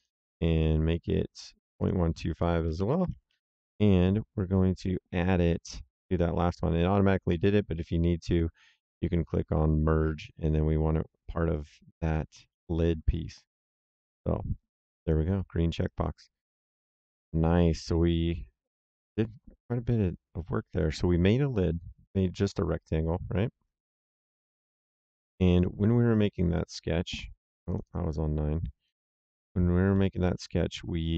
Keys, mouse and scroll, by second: 1.3 click, 2.7 KP_1, 2.9 KP_2, 3.0 KP_5, 3.2 KP_Enter, 12.4 middle click, 14.9 click, 15.8 right click, 24.0 click, 25.3 click, 27.6 click, 29.8 middle click.